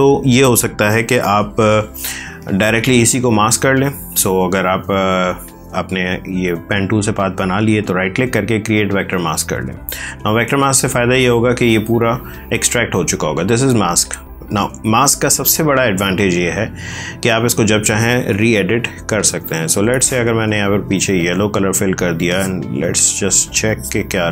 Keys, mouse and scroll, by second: 6.9 right click, 8.6 click, 15.4 click, 19.1 alt+BackSpace, 20.1 space, 21.1 ctrl+click.